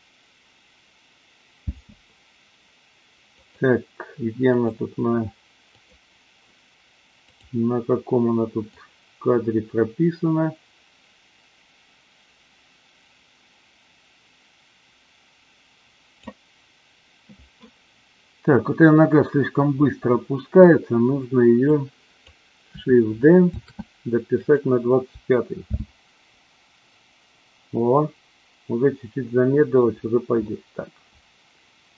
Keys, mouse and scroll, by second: 1.7 space, 3.3 click, 4.5 click, 5.7 click, 7.2 click, 8.7-16.2 drag, 21.7-22.2 drag, 23.5 shift+d, 24.3 click, 25.6 space, 30.3-31.9 middle drag.